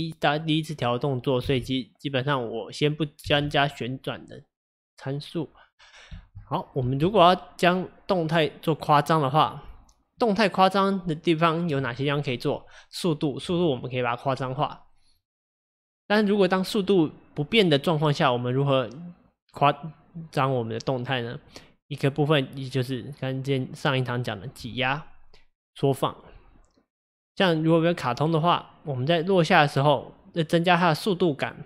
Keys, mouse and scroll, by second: 1.4 space, 3.3 space, 4.2 click, 6.2 space, 6.9 space, 7.2 click.